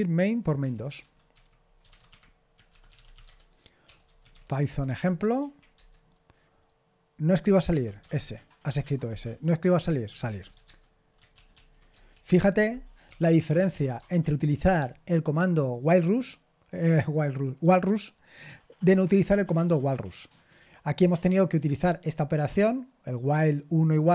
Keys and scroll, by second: 0.2-5.1 typing, 2.1 Escape, 5.4 Tab, 5.7 Return, 10.4 typing, 10.6 Return, 11.3 ctrl+p, 11.5 ctrl+p, 11.9 Return, 14.7 typing.